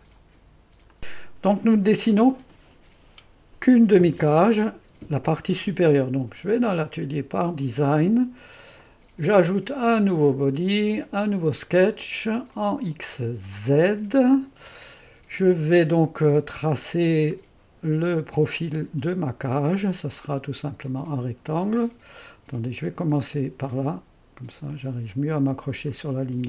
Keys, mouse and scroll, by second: 1.1-2.8 drag, 6.6-7.6 drag, 8.9 click, 9.8-12.1 drag, 12.6-15.8 drag, 16.1 click, 20.9-22.6 drag, 25.9 click.